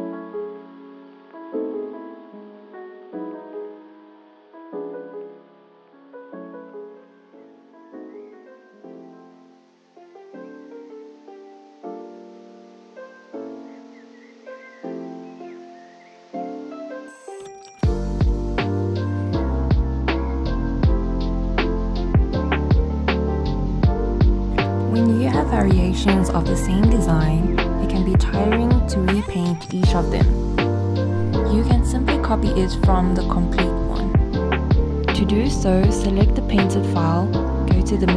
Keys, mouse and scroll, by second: 1.5-2.9 scroll down 1, 2.9-5.0 drag, 12.4 click, 14.5-15.2 scroll up 1, 15.3 alt+click, 15.9 alt+scroll up 1, 19.1 scroll down 1, 20.9-24.5 alt+drag, 24.5-25.8 alt+scroll up 1, 28.3 click, 34.0 click, 35.8-37.2 scroll down 2, 37.9 click.